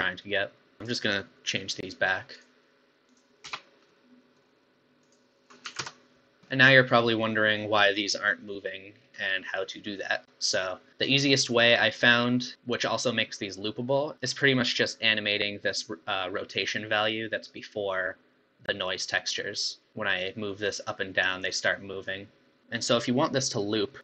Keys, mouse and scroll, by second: 0.9-2.4 drag, 3.1 click, 3.6 BackSpace, 3.9-5.1 middle drag, 5.1-6.4 drag, 6.4 scroll down 3, 6.5-8.9 middle drag, 8.9 scroll down 4, 9.2-11.6 middle drag, 11.6 scroll up 4, 12.3 scroll up 4, 12.5-14.1 middle drag, 16.5-19.6 drag, 22.6-23.7 middle drag.